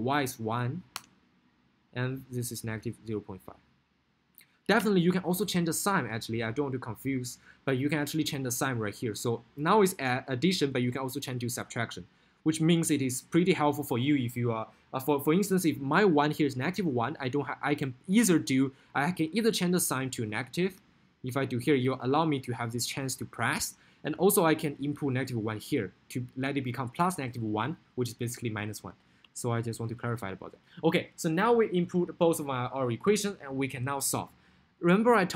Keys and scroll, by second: 0.8 1, 1.1 Return, 3.5 0, 4.2 ., 4.5 5, 5.0 Return, 20.7 Left, 21.9 Right, 24.2 Right.